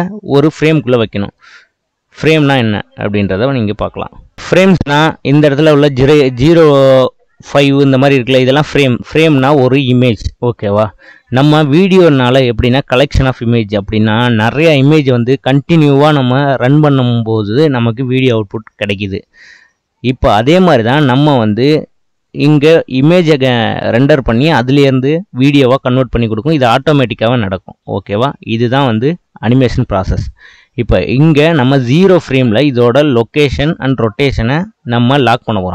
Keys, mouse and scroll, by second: 1.0-4.1 middle drag, 4.4-6.1 scroll down 1, 8.8-11.8 drag.